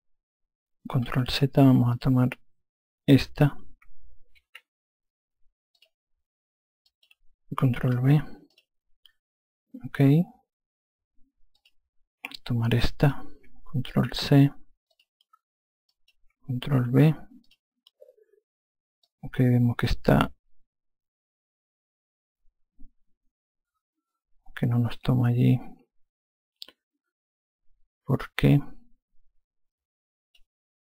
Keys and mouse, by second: 1.5 ctrl+z, 2.4 click, 3.5 click, 6.2 click, 8.9 click, 12.0 click, 13.2 click, 15.3 click, 17.3 ctrl+v, 17.8 click, 19.5 alt+click.